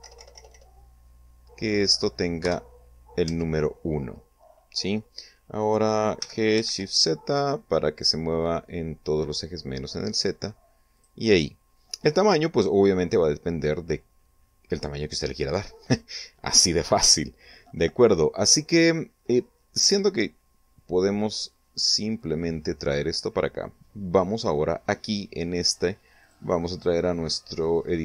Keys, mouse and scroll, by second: 0.0 Tab, 0.6 BackSpace, 3.0 1, 3.8 Tab, 6.7 g, 7.2 shift+z, 11.5 click, 22.8-23.9 drag, 26.8 click, 27.3 click.